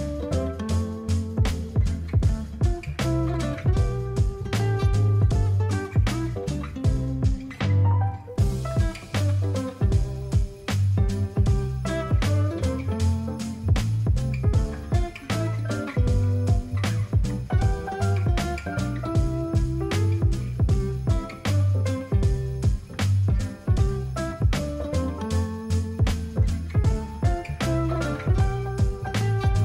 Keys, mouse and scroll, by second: 6.2-6.9 alt+scroll, 7.8 alt+scroll up 4, 8.0 alt+scroll, 8.1-9.2 alt+scroll up 6, 9.2 alt+scroll, 10.1 alt+scroll down 7, 10.2 alt+scroll, 10.4-10.7 alt+scroll down 5, 10.7-12.9 alt+scroll, 12.9 alt+scroll down 10, 17.6 ctrl+t, 18.8 alt+click, 21.0-22.1 alt+scroll up 4, 26.3 alt+scroll down 3, 28.1-29.6 alt+scroll.